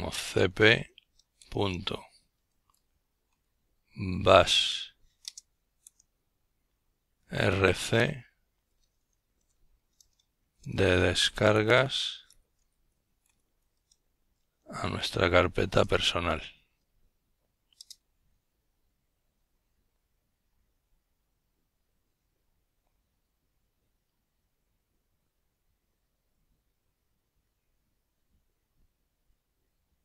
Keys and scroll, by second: 0.0-4.0 typing, 6.1 typing, 8.0 typing.